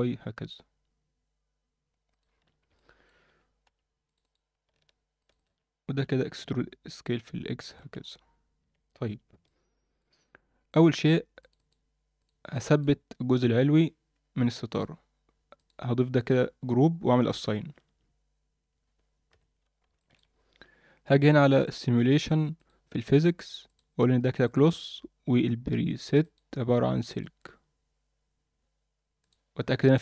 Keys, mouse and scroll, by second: 2.3 scroll down 2, 2.4 Tab, 2.7 middle drag, 3.2 Tab, 3.6 2, 4.1 click, 4.2 click, 5.2 shift+click, 5.4 shift+click, 5.9 e, 8.0-8.5 scroll down 1, 9.1 Tab, 9.4 middle click, 10.2 Tab, 10.7 click, 10.9 click, 11.4 click, 11.6 click, 12.5 click, 12.7 click, 14.7 click, 15.5 click, 17.2 click, 17.8 Tab, 18.7-19.3 scroll down 2, 19.3 KP_1, 19.9 shift+middle drag, 20.3-20.9 scroll up 1, 21.6 click, 22.6 drag, 23.7 click, 24.4 drag, 26.2-27.4 drag, 29.3 click.